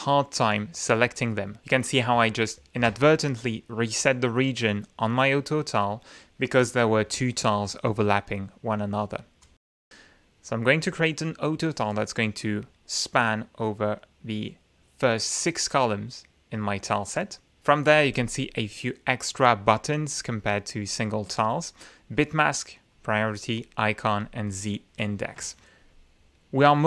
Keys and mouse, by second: 9.4 click, 10.5 click, 11.5-12.8 drag, 19.6 click, 20.3 click, 20.7 click, 21.4 click, 22.9 click, 23.5 click, 24.0 click.